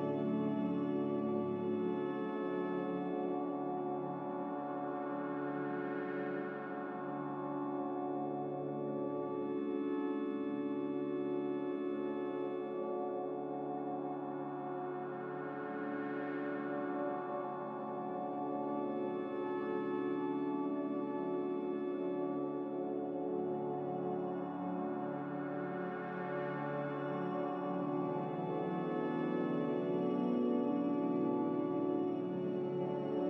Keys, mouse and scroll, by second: 12.9 z, 17.0 Caps_Lock, 18.7 a, 20.9 click, 24.5 click, 28.2 click.